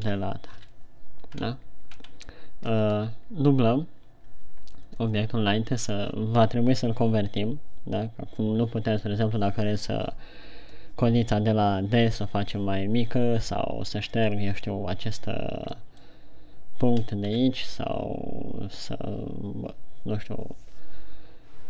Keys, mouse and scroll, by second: 1.0 KP_1, 1.8-2.3 scroll down 2, 2.3-2.7 shift+scroll up 2, 16.3 middle click, 17.6 KP_1.